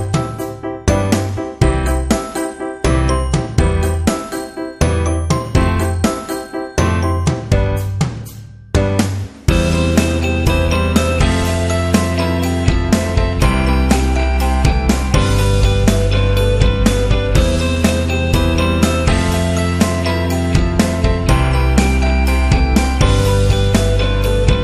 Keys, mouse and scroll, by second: 1.1 click, 1.9 click, 2.2 Up, 4.4 alt+shift+click, 6.7 Up, 7.2 Up, 7.8 Up, 8.6 Up, 9.9 Down, 10.2 click, 16.0 click, 18.9-22.2 typing, 22.9 ctrl+a, 23.9 click.